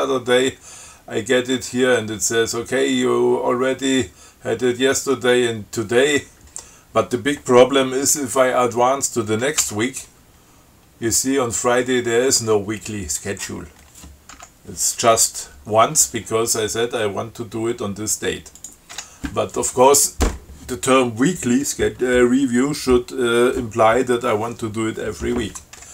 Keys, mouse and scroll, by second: 9.8 f, 14.6 b, 18.8 click, 19.2 q.